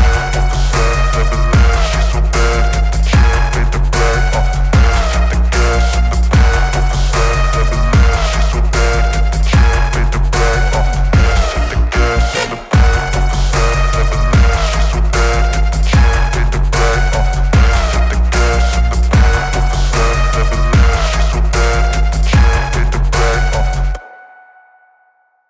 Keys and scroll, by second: 0.0-0.3 typing, 0.6 ctrl+s, 2.3 Up, 2.4 End, 2.7 Return, 3.3 Return, 4.3 Down, 4.5 Return, 4.9 shift+9, 5.5 End, 6.3-17.0 typing, 6.5 Return, 8.7 Return, 18.2-22.7 typing, 23.0 Return, 23.5 ctrl+s.